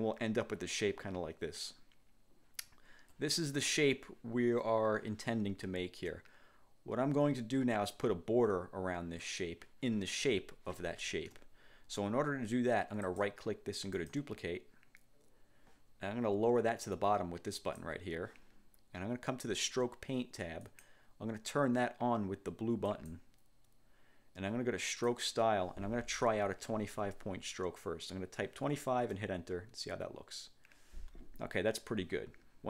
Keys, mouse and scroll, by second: 6.4-6.8 ctrl+scroll up 3, 11.4 1, 13.2 click, 14.1 click, 17.7 click, 20.8 click, 23.0 click, 25.0 click, 26.8 2, 27.0 5, 29.2 Return.